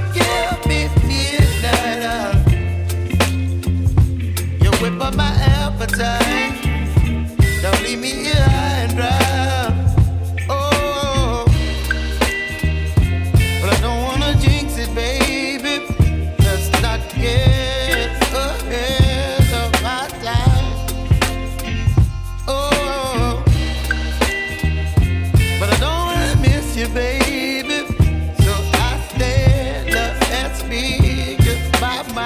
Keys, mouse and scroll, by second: 1.6-22.2 drag, 22.5-23.7 drag, 23.7 ctrl+z, 25.4-32.2 drag.